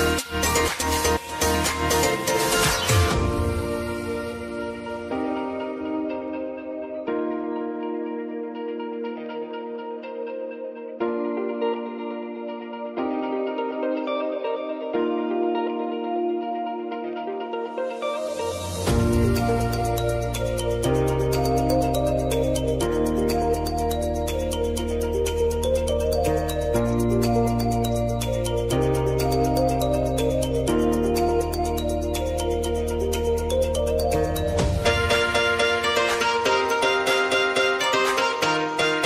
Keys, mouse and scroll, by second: 0.3 space, 1.8 typing, 3.3 click, 4.4 scroll down 1, 5.2-9.3 drag, 9.3 space, 11.0 click, 11.5 space, 13.4-15.0 drag, 15.0 space, 16.7 click, 17.0 space, 18.8 click, 20.2 u, 20.6 scroll down 1, 21.8 Page_Down, 22.6 click, 23.4 [, 23.8 Page_Down, 24.7 click, 25.2 [, 25.6 Page_Down, 26.5 click, 27.0 [, 27.4 Page_Down, 28.6 click, 28.9 [, 29.3 Page_Down, 30.3 click, 31.1 [, 31.6 Page_Down, 32.8-35.0 shift+drag, 35.7 Page_Up, 36.5 click, 36.9 [, 37.3 Page_Down, 38.3 click, 38.9 [.